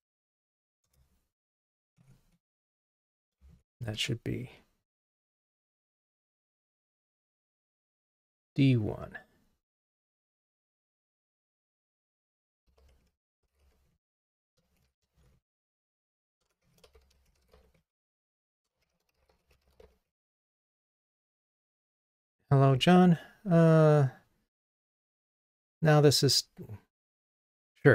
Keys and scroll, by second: 1.0 Return, 1.9 Return, 2.0 Delete, 11.2 super+d.